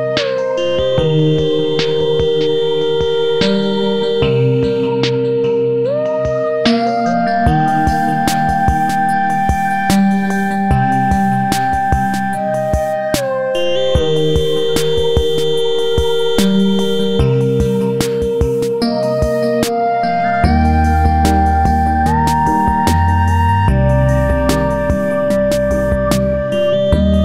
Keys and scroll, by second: 3.2 ctrl+c, 3.6 ctrl+v, 6.2 Right, 12.1 ctrl+c, 12.3 ctrl+v, 15.4 Right, 16.2 Left, 20.5 ctrl+a, 24.5 Right.